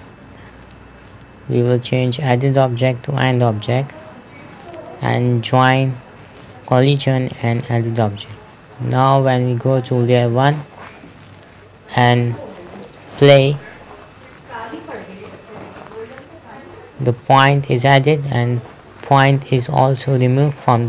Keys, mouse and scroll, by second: 11.7 KP_0, 13.7 p, 16.2-18.1 typing, 20.1 typing.